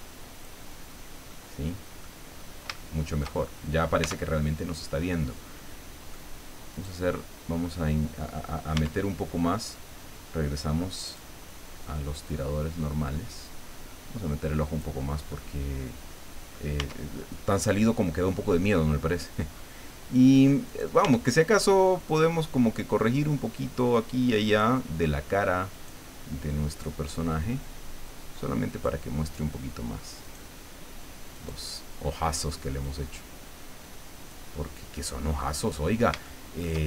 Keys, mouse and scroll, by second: 0.8 scroll down 1, 1.3 middle click, 2.3 scroll up 1, 2.7 shift+middle click, 3.6 shift+scroll up 3, 4.0 Tab, 5.1-6.3 middle drag, 6.7 right click, 7.6 scroll down 2, 8.8 Tab, 9.3-9.7 scroll up 2, 11.1 click, 12.3-15.0 drag, 15.3-16.7 middle drag, 16.8 Tab, 18.3 scroll down 1, 19.5-20.1 scroll up 4, 20.7 right click, 21.0 Tab, 24.5 click, 25.7 right click, 26.7-29.0 drag, 30.2 right click, 31.3 right click, 32.8-34.5 drag, 35.5 middle click, 36.2 shift+middle click.